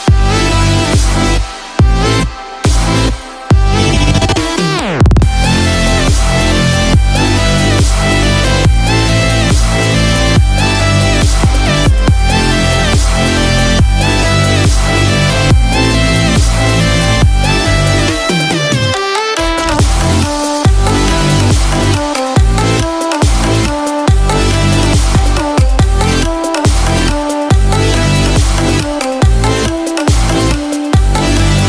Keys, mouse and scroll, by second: 0.3 shift+middle click, 0.8 middle click, 1.4-2.2 scroll down 1, 6.2 KP_1, 7.5-8.5 scroll down 5, 8.4 middle click, 11.1 KP_1, 11.1 KP_7, 11.9 scroll down 1, 12.5-13.0 scroll down 1, 13.1 shift+middle click, 13.7 scroll up 1, 14.3 shift+middle click, 14.7-15.1 scroll up 1, 15.5 click, 18.5 g, 25.8 g, 28.0 shift+d.